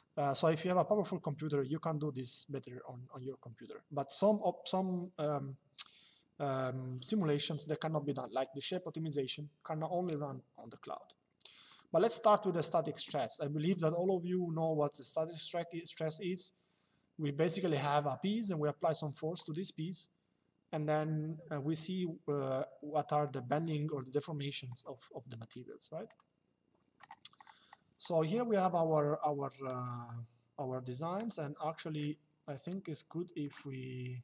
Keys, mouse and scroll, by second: 8.1 click, 11.4 click, 25.8 click, 28.8 shift+middle click, 32.4 shift+middle click.